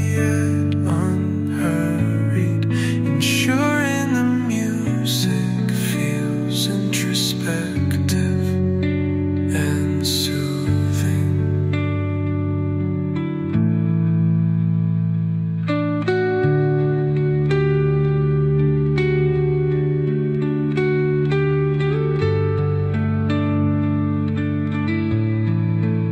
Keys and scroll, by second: 3.2 space, 10.6 Delete, 13.9 space, 22.6 Delete.